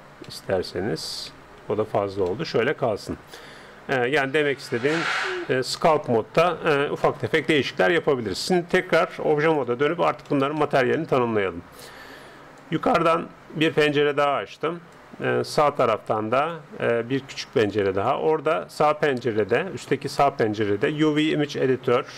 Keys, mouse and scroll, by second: 0.3-1.8 middle drag, 1.7 ctrl+z, 2.4-3.9 middle drag, 3.2 Tab, 4.6 Tab, 6.4-9.6 middle drag, 9.0-10.9 drag, 10.3-12.6 middle drag, 12.6-14.4 drag, 15.0-18.2 drag.